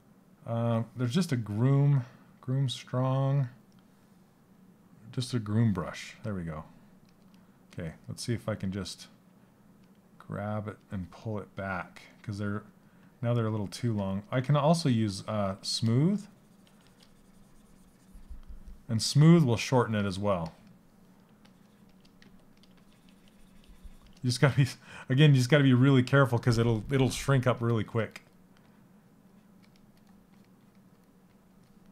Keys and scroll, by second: 5.7 s, 21.8 s.